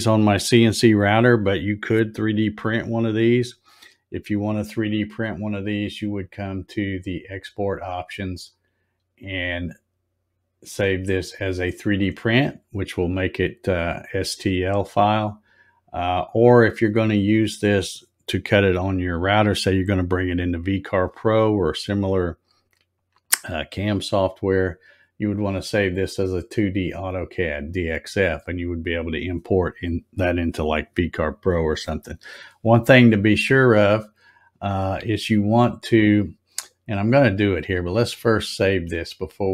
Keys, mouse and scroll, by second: 8.3 click, 28.6 click, 37.5 click.